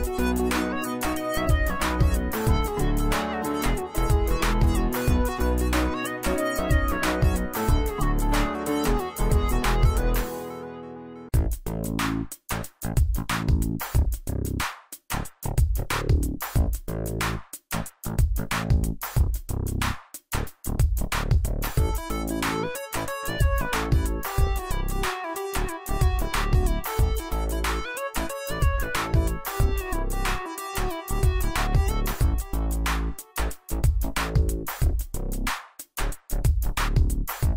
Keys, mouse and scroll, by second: 5.0 right click, 5.6 click, 6.2 space, 6.2 click, 6.7-7.3 space, 8.0-8.7 drag, 12.2 z, 12.5 alt+click, 12.9 space, 13.1-13.5 click, 13.1 space, 14.0 click, 14.7-17.8 alt+drag, 19.1-20.1 drag, 25.1 shift+click, 28.6 shift+click, 28.9 right click, 29.9 click, 36.5 click.